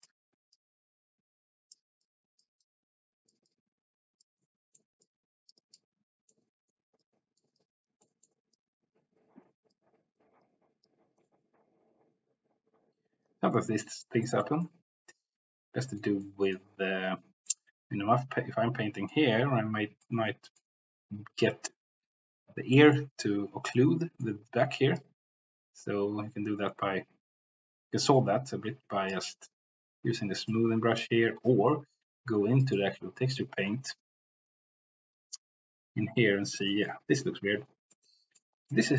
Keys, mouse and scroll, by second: 0.5-1.7 drag, 1.4 c, 2.0 click, 2.8 click, 3.7 click, 4.4 middle click, 5.4 click, 6.3 middle click, 7.2 click, 7.7 click, 8.0 middle click, 8.5-9.8 drag, 10.4 click, 11.2 middle click, 13.2 click, 14.2 middle click, 14.6-16.0 middle drag, 16.2 middle click, 17.5-19.1 middle drag, 20.0 middle click, 22.7 middle click, 23.7 middle click, 25.0-29.3 drag, 30.5-34.8 drag, 36.7 shift+middle click, 38.1 middle click, 38.7 middle click.